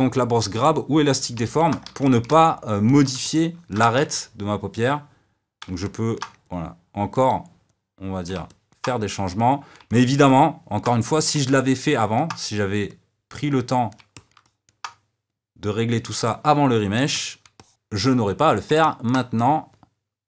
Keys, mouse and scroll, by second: 0.5 click, 1.4 middle click, 1.8 f, 2.2-3.9 middle drag, 3.9 f, 4.9 click, 5.8 middle click, 6.6-8.4 drag, 8.4 middle click, 9.2 click, 9.8-13.0 shift+middle drag, 13.0-14.1 drag, 14.1-15.4 shift+middle drag, 15.4 click, 16.2-19.8 middle drag, 19.8 click.